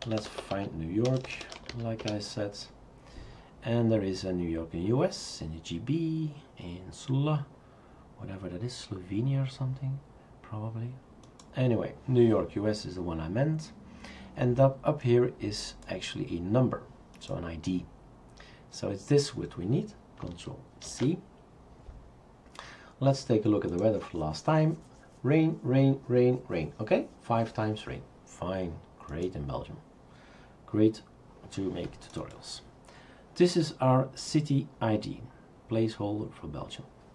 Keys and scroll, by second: 0.0-2.2 typing, 20.8 ctrl+c.